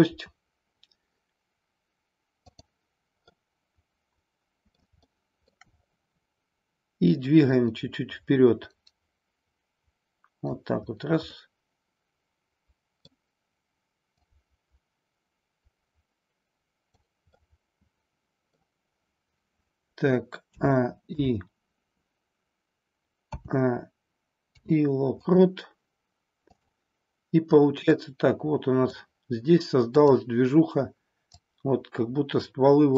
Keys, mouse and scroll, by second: 2.4 click, 3.3-4.8 middle drag, 5.0-5.5 shift+middle drag, 7.4-10.5 drag, 11.3-13.1 middle drag, 14.1-17.0 drag, 17.3-18.5 middle drag, 18.5 scroll down 1, 20.4 a, 21.0 i, 23.3 a, 24.4 i, 27.9-29.0 drag, 29.9 click, 31.3-32.9 drag.